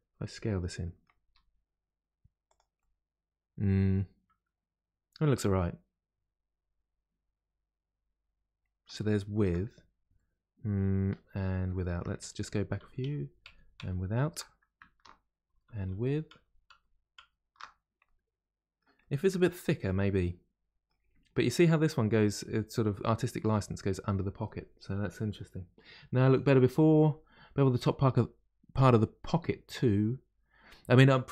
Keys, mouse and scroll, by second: 1.2 s, 2.7-5.7 middle drag, 9.0 shift+middle click, 9.7-10.1 scroll down 1, 10.1-11.3 middle drag, 11.3-11.7 scroll up 1, 11.7 shift+middle click, 12.3 ctrl+z, 12.6 ctrl+z, 15.4 ctrl+shift+z, 15.7 ctrl+shift+z, 18.0-22.3 middle drag, 29.2-31.3 middle drag.